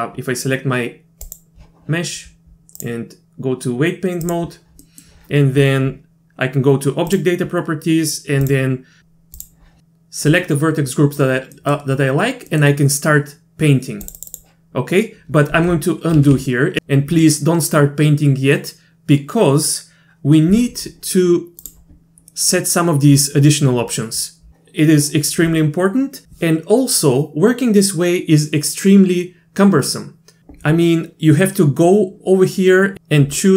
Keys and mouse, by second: 1.3 click, 2.8-4.3 drag, 4.8 middle click, 7.1 click, 8.5 click, 9.4 click, 11.6 middle click, 12.5 middle click, 14.1 click, 14.2 click, 14.3 click, 16.2 ctrl+z, 16.3 ctrl+z, 16.8 ctrl+z, 21.6 drag.